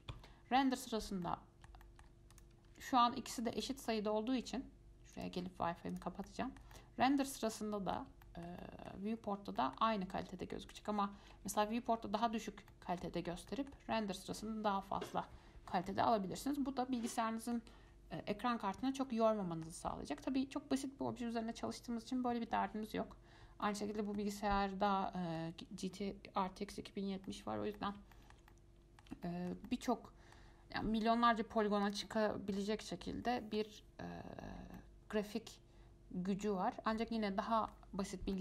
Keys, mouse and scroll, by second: 1.4-2.5 middle drag, 2.5 click, 2.9 Tab, 3.4 Tab, 3.7 click, 5.3-6.8 drag, 6.9-10.9 middle drag, 10.9-12.9 drag, 12.9-13.4 middle drag, 13.4 scroll down 1, 13.7-20.4 middle drag, 20.4-20.9 scroll up 1, 23.8-24.4 middle drag, 24.4-24.9 scroll down 2, 24.9 scroll up 1, 25.1-32.0 middle drag, 32.0 click, 32.8-38.0 middle drag.